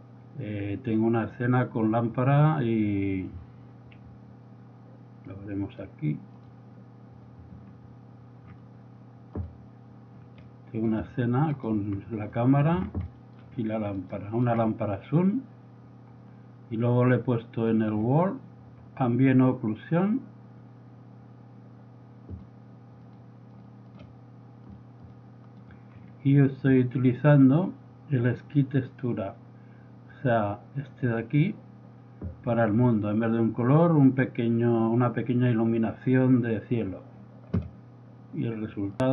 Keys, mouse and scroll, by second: 5.6 click, 5.7 click, 11.6-12.2 drag, 17.2 click, 22.4-24.1 drag, 26.0 middle click, 26.7-27.9 middle drag, 37.2-37.6 drag, 38.9 click.